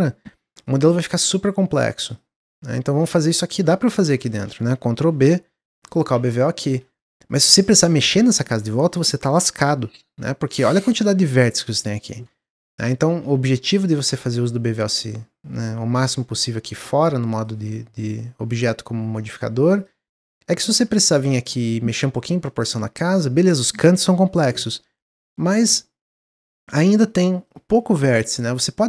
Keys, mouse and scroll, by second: 0.5 alt+shift+click, 0.9 alt+shift+click, 1.7 alt+shift+click, 2.1 alt+shift+click, 2.6 middle click, 3.3 scroll up 2, 3.6-5.0 middle drag, 5.0 ctrl+b, 6.0 Tab, 6.3 scroll down 1, 6.6 middle click, 7.0 Tab, 10.7-12.0 scroll up 3, 12.0-12.6 scroll down 2, 12.6 ctrl+z, 12.9 ctrl+z, 13.2 ctrl+z, 13.4 ctrl+z, 13.9 ctrl+z, 14.2 Tab, 17.2 click, 19.7 click, 19.9 Tab, 20.3 middle click, 20.6 click, 20.7 Tab, 21.1 click, 21.3 Tab, 21.5 middle click, 22.2 scroll down 2, 22.4 middle click, 23.2-23.9 scroll up 3, 23.9-24.4 scroll up 1, 24.4 middle click, 24.7-26.0 scroll down 1, 26.0-28.8 middle drag.